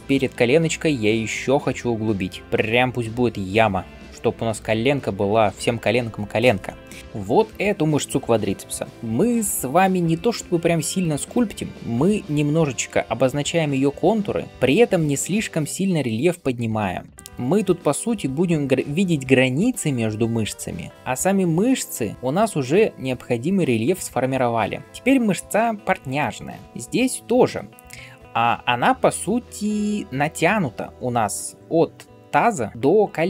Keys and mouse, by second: 8.4 h, 8.5-14.5 drag, 8.5-14.5 middle drag, 8.5-14.5 right drag, 8.9 h, 24.8 [.